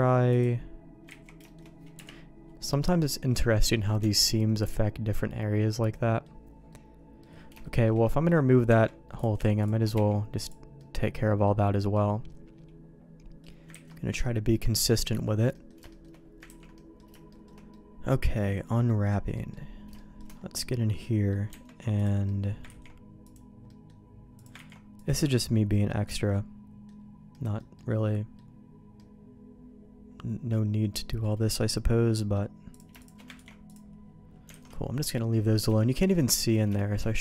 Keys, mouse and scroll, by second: 1.2 ctrl+z, 1.4 shift+middle click, 1.9 KP_Decimal, 3.1 middle click, 4.0 Tab, 4.6-6.2 middle drag, 6.7 middle click, 7.6 shift+middle click, 8.0 middle click, 8.7 Tab, 9.1 right click, 9.9 x, 10.8 middle click, 11.9-13.4 middle drag, 13.7 ctrl+s, 13.9 middle click, 15.5 middle click, 15.9 shift+middle click, 16.5 ctrl+s, 16.7 middle click, 17.3 middle click, 17.7-18.8 middle drag, 19.3 middle click, 19.9 shift+middle click, 20.6 middle click, 21.5 Tab, 22.0 click, 22.2 middle click, 22.6 ctrl+e, 23.7 middle click, 24.3 click, 24.8 ctrl+e, 25.8-26.8 middle drag, 27.3 middle click, 27.7 middle click, 28.9-30.5 middle drag, 30.9 middle click, 32.1 middle click, 32.7 click, 33.3 ctrl+e, 34.5 alt+a, 34.7 middle click, 35.3 middle click, 35.7 shift+middle click, 36.3 middle click, 36.7 middle click.